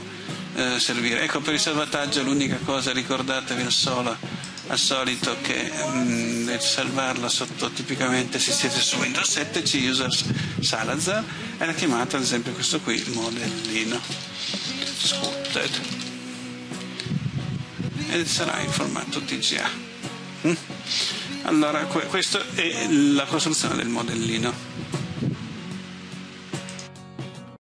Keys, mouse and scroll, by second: 12.8-16.6 typing, 18.8 click.